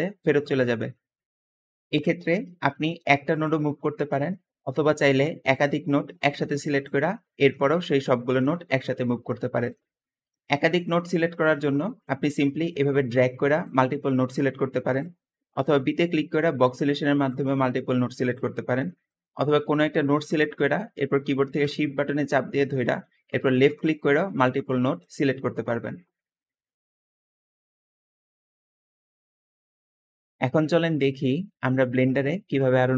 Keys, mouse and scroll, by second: 1.4 Escape, 1.6 Escape, 2.2 middle click, 2.2-2.8 scroll down 2, 2.7 middle click, 2.7 g, 3.7-4.4 scroll down 2, 4.9 click, 6.1 g, 6.1 g, 6.6 click, 7.0-7.7 middle drag, 8.6 g, 9.4 click, 9.8-10.1 scroll up 2, 10.1 middle click, 10.1-10.5 scroll down 2, 10.6 click, 11.2 middle click, 11.6 middle drag, 11.6 scroll down 1, 12.9-13.5 drag, 14.7 click, 15.8 b, 16.5-17.1 drag, 18.1 click, 19.4 g, 23.3 shift+click, 24.1 g, 29.8 middle click, 29.8-31.3 scroll down 4, 30.5 middle click, 31.5 middle click, 31.5-32.2 scroll up 3, 32.2-32.9 scroll down 2.